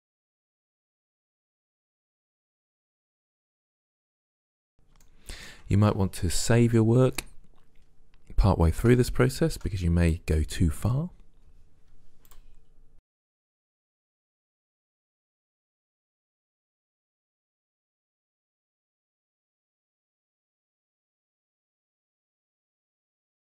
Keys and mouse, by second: 0.2 right click, 0.5 middle click, 1.6 middle click, 2.3 c, 2.6 middle click, 2.8 c, 3.0 click, 3.2 middle click, 3.8 middle click, 4.3 Delete, 4.7 middle click, 5.2 right click, 5.4 ctrl+Tab, 5.4 click, 5.6 click, 5.8 Delete, 6.0 click, 6.3 right click, 6.6 Delete, 6.6 click, 7.9 right click, 8.0 Delete, 9.8 right click, 10.0 Delete, 11.1 middle click, 11.9 Delete, 12.4 click, 12.6 middle click, 12.8 Delete, 12.9 middle click, 13.3 middle click, 13.8 click, 14.2 middle click, 14.8 middle click, 15.4 middle click, 16.6 middle click, 16.8 middle click, 17.2 Delete, 18.6 Delete, 18.8 middle click, 19.4 right click, 19.6 Delete, 19.8 middle click, 20.5 Delete, 21.3 Delete, 21.5 click, 22.1 click.